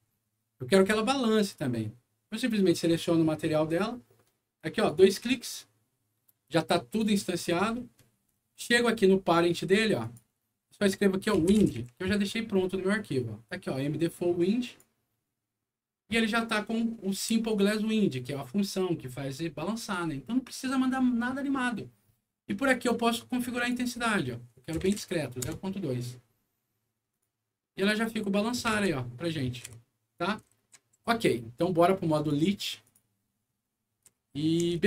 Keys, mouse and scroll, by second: 0.7 click, 3.3-3.8 scroll down 2, 4.7 click, 4.9 click, 6.5 click, 7.4-9.1 scroll down 12, 10.0 click, 11.1-12.3 typing, 14.6 click, 17.3 scroll up 2, 19.0-19.6 scroll up 4, 20.0 scroll up 2, 20.9 scroll up 2, 21.7 scroll up 2, 22.6 click, 23.6 click, 24.8 KP_0, 24.8 KP_Decimal, 25.0 KP_2, 25.4 Return, 27.1 click, 27.9-29.2 right drag, 28.0 s, 28.8 q, 29.6 Escape, 30.4 right click, 30.6 s, 31.0 a, 32.1 click, 32.8 click, 34.0-34.8 right drag, 34.1-34.8 typing.